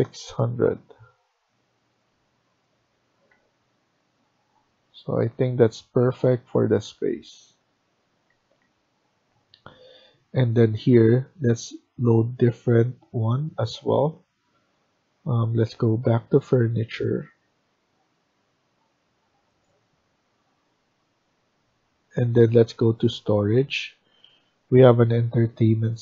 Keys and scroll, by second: 3.2 Escape, 5.2 Left, 5.7 Right, 5.9 Right, 6.4 Right, 6.7 Down, 8.2 Escape, 8.5 Escape.